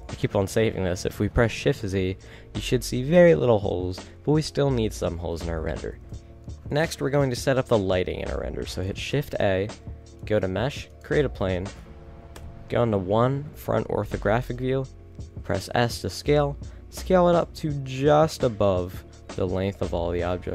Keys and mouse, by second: 3.6-4.2 middle drag, 4.7-6.1 middle drag, 6.1 a, 6.8 right click, 7.4 a, 8.7 middle click, 9.1 shift+a, 12.4 KP_1, 13.8 middle click, 14.6 s, 17.9 click, 19.3-20.5 middle drag, 20.4 g.